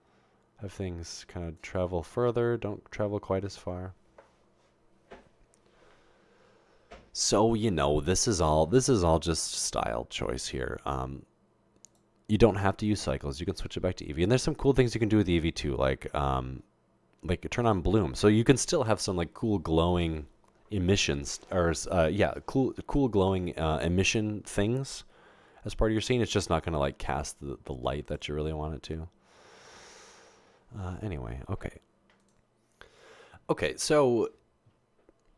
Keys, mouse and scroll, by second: 13.5 click, 17.7 click, 25.2 typing, 26.4 typing.